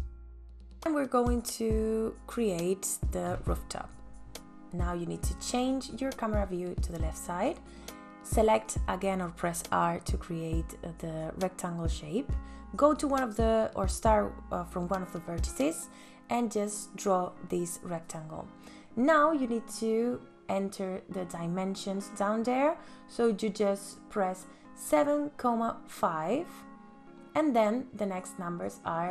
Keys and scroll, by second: 9.0 r, 25.4 KP_7, 25.9 ,, 26.1 KP_5, 27.2 shift+,.